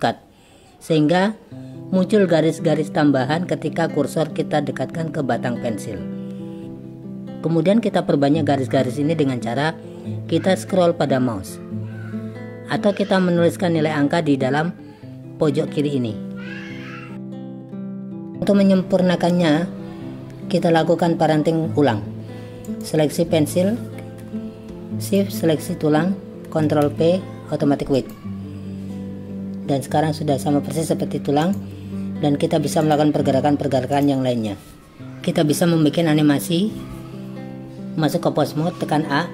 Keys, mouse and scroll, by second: 5.2 ctrl+r, 11.8 click, 12.8-15.1 drag, 22.7 click, 25.2 shift+click, 26.8 ctrl+p, 31.5 click, 32.9-34.1 drag.